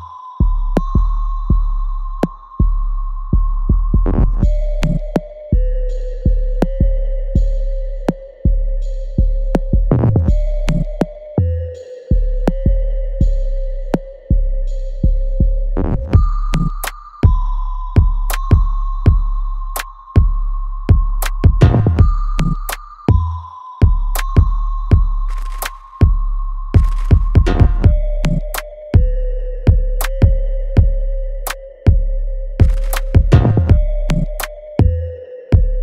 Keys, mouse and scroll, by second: 0.2-7.0 ctrl+drag, 7.0 alt+right click, 7.4 alt+click, 8.3 alt+middle click, 9.1 alt+right click, 10.0 alt+click, 10.5 alt+right click, 10.9 alt+click, 11.7 alt+middle click, 12.3 alt+right click, 13.1 click, 15.4 click, 16.9-20.6 ctrl+drag, 20.6-23.5 alt+drag, 23.5-26.5 ctrl+drag, 26.5 alt+click, 27.2 alt+right click, 27.7-29.1 alt+drag, 29.1 right click, 29.6 click, 30.3 alt+right click, 30.8 alt+click, 31.2 alt+middle click, 31.7 alt+click, 32.4 alt+middle click, 33.5 click, 33.8 alt+click.